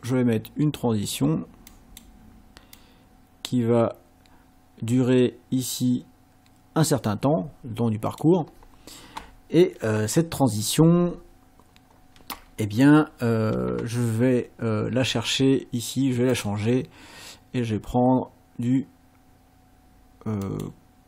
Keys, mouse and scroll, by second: 1.7 click, 2.8-8.4 drag, 16.3 click, 20.4 click.